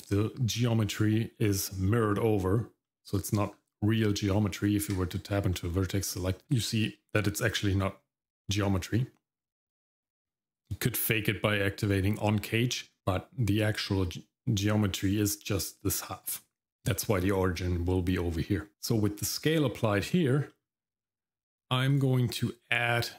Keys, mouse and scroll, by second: 2.8 middle click, 4.6 Tab, 5.5 middle click, 10.5 click, 13.0 Tab, 13.0 middle click, 13.0 click, 18.4 middle click, 18.7 scroll up 1, 19.8 middle click, 20.1-20.5 scroll up 1, 20.5 shift+middle click, 21.9-23.1 drag.